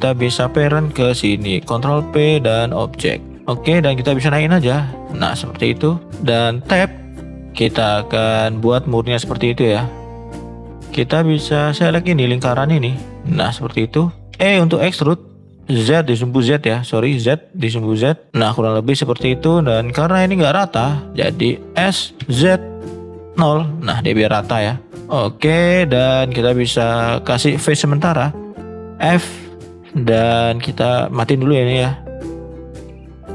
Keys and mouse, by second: 0.3 shift+click, 1.6 ctrl+p, 4.2 click, 5.5 middle click, 6.7 Tab, 7.1 middle drag, 7.5 middle click, 7.8 middle drag, 8.3 middle click, 9.2 shift+middle click, 11.7 click, 12.7 alt+shift+click, 13.5 middle click, 14.1 shift+middle click, 14.4 e, 18.5 middle click, 19.2 middle click, 21.7 s, 24.3 middle click, 24.9 click, 25.9 middle click, 26.9 shift+middle click, 27.3 middle click, 28.9 f, 29.4 middle click, 31.3 click, 31.8 shift+middle click.